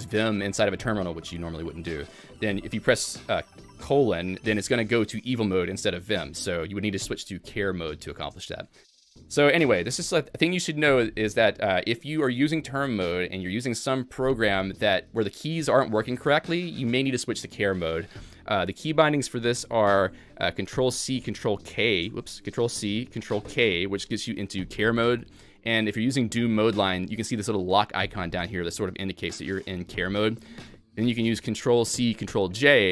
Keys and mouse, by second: 21.7 ctrl+f, 22.3 ctrl+g, 23.5 ctrl+k, 32.4 ctrl+j.